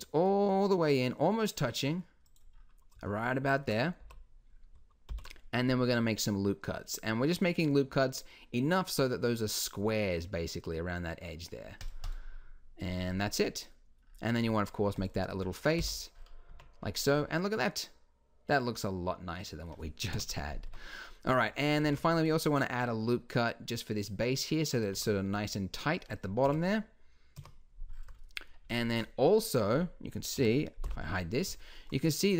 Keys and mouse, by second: 2.6-5.1 middle drag, 4.0 n, 5.1 ctrl+r, 13.2-17.3 drag, 15.8 f, 16.5 Tab, 20.1 KP_1, 20.7 Tab, 21.8 ctrl+r, 24.9 Tab, 26.4 KP_1, 26.5 KP_4, 27.3 KP_1, 30.3 KP_1, 30.8 h.